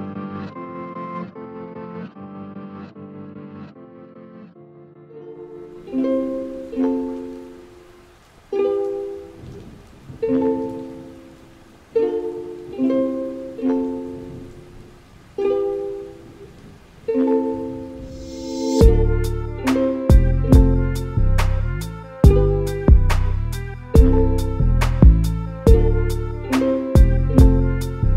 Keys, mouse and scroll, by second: 3.5 KP_Subtract, 4.4 alt+s, 7.5 a, 7.7 a, 8.5-9.9 middle drag, 9.9-10.9 scroll down 1, 10.9 KP_1, 11.2 a, 11.4 a, 11.9 z, 12.5 click, 15.6 a, 15.7 a, 16.1 3, 16.7 click, 18.9-19.4 scroll up 2, 19.7 g, 23.4-23.9 scroll down 1, 23.9 z, 24.6 a, 24.8 a, 25.5 shift+middle click, 26.1 z, 26.6 click, 27.9 z.